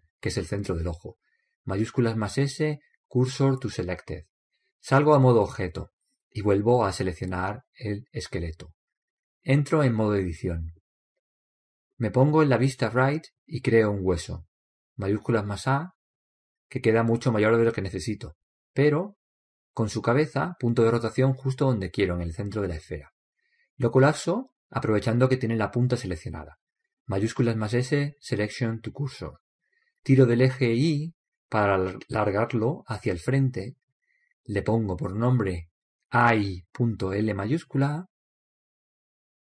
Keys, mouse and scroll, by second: 0.5 shift+s, 6.5 Tab, 8.2-9.9 right drag, 10.7 Tab, 11.9-13.5 scroll down 1, 13.5 middle click, 15.9 shift+a, 16.6-21.0 middle drag, 21.0-21.4 scroll up 1, 26.3-27.6 scroll down 1, 27.6-28.0 scroll down 1, 27.6 shift+s, 31.4 click, 35.0-36.8 right drag, 36.1-37.9 drag.